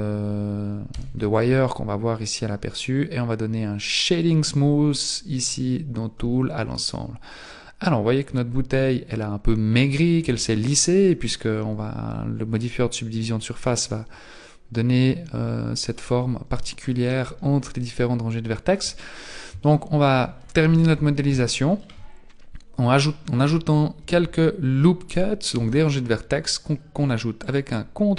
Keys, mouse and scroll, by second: 0.9 z, 2.1-2.7 scroll up 2, 2.7-4.1 scroll down 1, 4.1 click, 6.3-6.9 scroll down 3, 6.9-7.3 scroll up 2, 7.9-8.7 scroll up 2, 8.7 scroll down 2, 9.8-10.2 scroll down 2, 10.2 Tab, 10.8-11.3 scroll up 2, 13.2-13.5 scroll up 2, 16.9 shift+middle click, 18.8-19.3 shift+scroll up 1, 19.7 shift+middle click, 20.7 z, 21.4 shift+middle click, 24.0 z, 25.5 ctrl+r.